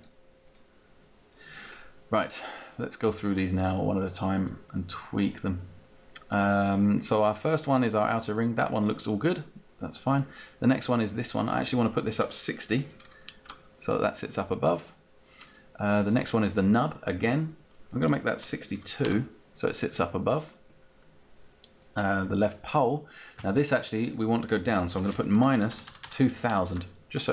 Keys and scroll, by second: 12.4-13.4 typing, 13.4 Return, 18.2-19.0 typing, 24.7-25.9 typing, 26.7 Return.